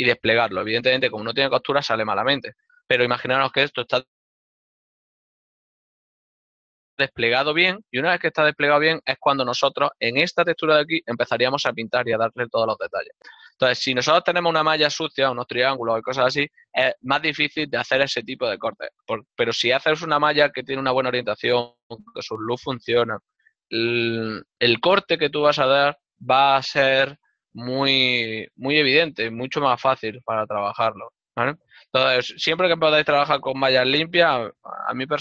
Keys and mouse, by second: 0.4 click, 9.1 ctrl+middle click, 32.2 middle click.